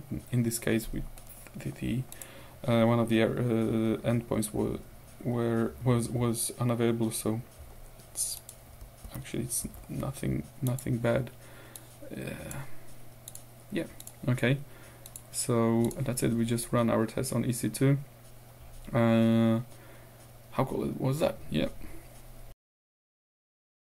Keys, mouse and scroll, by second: 2.2 click, 7.1-7.9 scroll up 2, 8.4 click, 9.1 ctrl+w, 9.7 ctrl+q, 11.8 click, 13.3 click, 14.0 click, 15.1-16.6 scroll up 3.